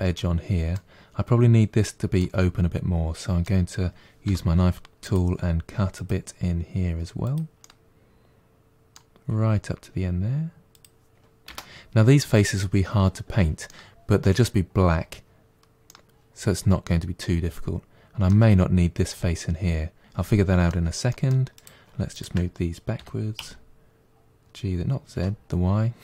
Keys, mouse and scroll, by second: 0.0-4.1 middle drag, 4.1 k, 7.5-10.5 middle drag, 13.5-18.7 middle drag, 20.0-21.4 middle drag, 21.4 click, 22.0 shift+click, 22.8 g.